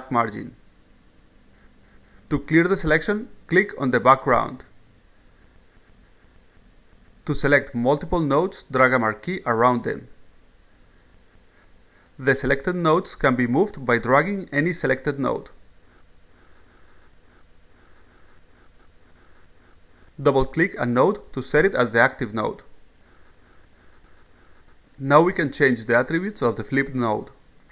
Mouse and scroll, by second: 6.4 click, 11.0-12.1 drag, 14.9-15.8 drag, 16.1 click, 16.7-17.2 drag, 17.7 click, 18.7 click, 23.3 click.